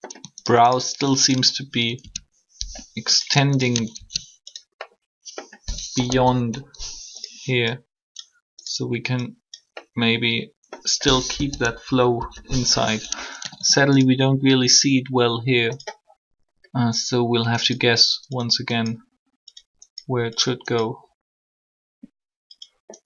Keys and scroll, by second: 6.1 1, 11.3 1, 12.1 3, 13.4 typing.